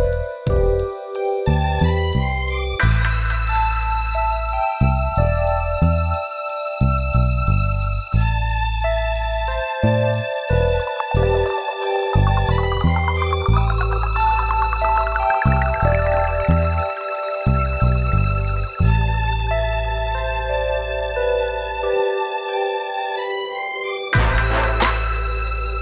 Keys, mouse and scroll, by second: 3.3 middle click, 4.2 scroll up 1, 7.8 click, 10.9 scroll up 1, 12.3 middle click, 13.2 scroll down 1, 14.4 scroll up 1, 15.3 click, 18.3 middle click, 19.7 scroll down 1, 21.9 click.